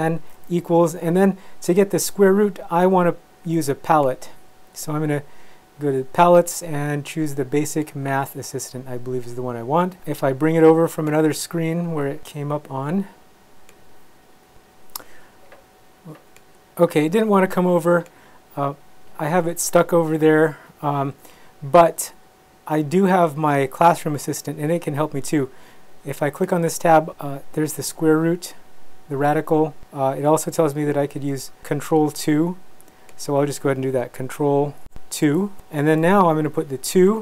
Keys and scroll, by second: 0.3 =, 35.3 ctrl+2, 36.9 2.